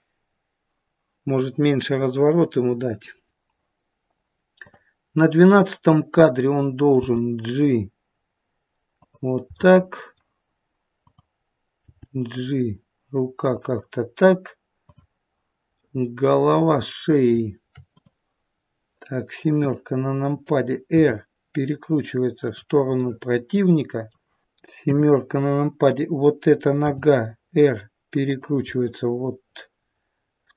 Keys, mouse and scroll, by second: 3.3 click, 4.6 click, 7.0 g, 9.6 middle click, 11.0 click, 11.7 g, 14.7 click, 15.7 middle click, 17.8 click, 19.5 KP_7, 20.8 r, 22.9 middle click, 24.4 click, 24.7 KP_7, 26.7 r, 28.6 middle click.